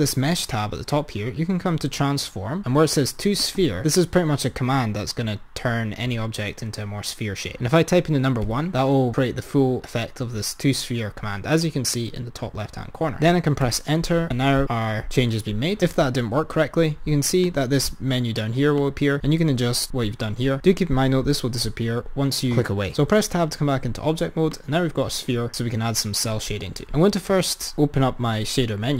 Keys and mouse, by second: 17.6-21.2 drag, 23.1 Tab, 24.6 click, 26.8-28.9 drag.